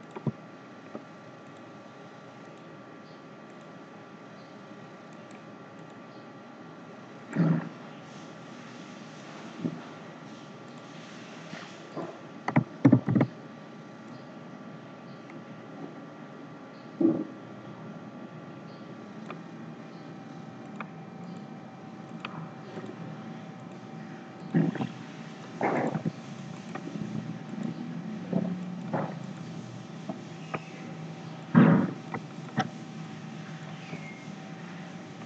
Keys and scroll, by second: 12.9 ctrl+c, 13.1 ctrl+f.